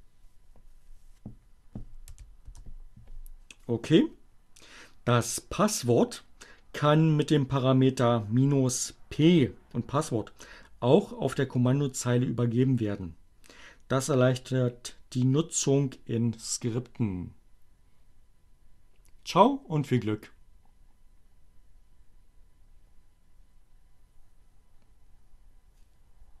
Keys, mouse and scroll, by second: 1.9 n, 2.3 Return.